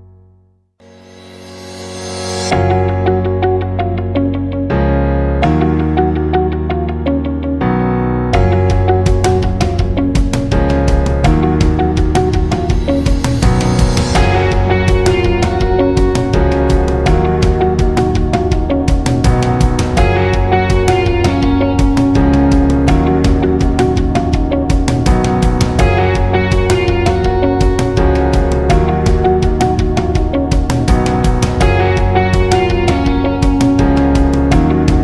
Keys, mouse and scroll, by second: 4.4 right click, 5.1-19.3 drag, 28.0 click, 28.3 alt+scroll down 1, 28.5 space, 28.7 click, 29.2 alt+scroll up 1, 29.4 space, 29.7 click, 30.0 space, 30.4-32.0 drag, 32.2 right click, 33.3 click, 33.9-35.0 alt+drag.